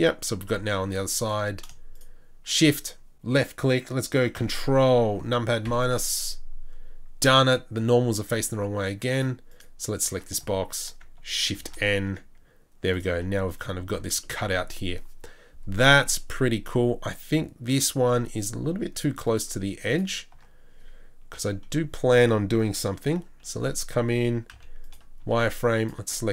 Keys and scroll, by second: 1.2 Tab, 10.1 Tab, 10.3 a, 11.6 shift+n, 12.1 Tab, 20.4 Tab, 21.1 Tab, 21.3 KP_3, 24.5 z, 25.2 b.